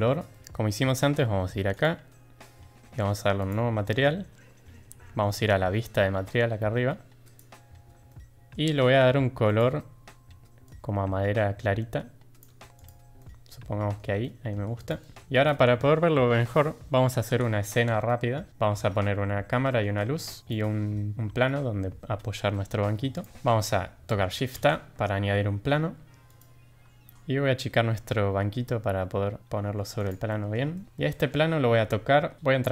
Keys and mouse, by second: 0.3 middle click, 3.3 click, 7.2 click, 8.1-8.5 shift+middle drag, 9.4 click, 12.7 click, 13.1-13.9 middle drag, 14.2 shift+middle drag, 14.8 click, 15.0 middle drag, 15.3 click, 19.5 middle click, 20.2 shift+middle drag, 20.4 click, 23.1 click, 24.5 shift+a, 27.1 ctrl+z, 27.4 s, 30.2 middle drag, 30.7 shift+middle drag, 30.9-31.3 shift+middle drag, 32.4 Tab.